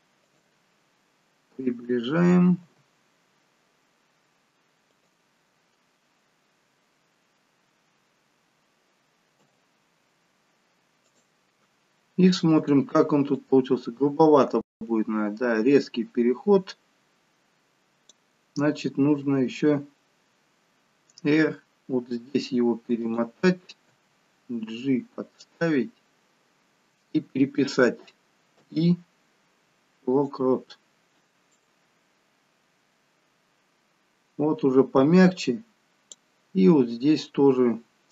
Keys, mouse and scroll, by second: 0.8 scroll up 6, 2.1 scroll down 1, 2.7 g, 12.2 scroll down 3, 13.5 click, 18.5 scroll up 3, 21.1 r, 23.8 g, 31.5 click.